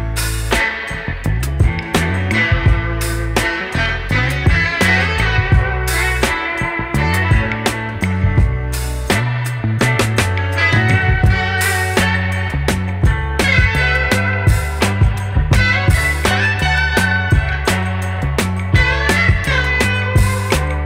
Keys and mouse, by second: 1.9 click, 5.6 click, 7.8 space, 8.0 click, 9.0 0, 10.1 click, 10.3-12.7 typing, 10.4 click, 10.8 click, 11.6 click, 12.1 click, 13.8 click, 14.7 space, 15.0 click, 15.2 space, 20.4 click.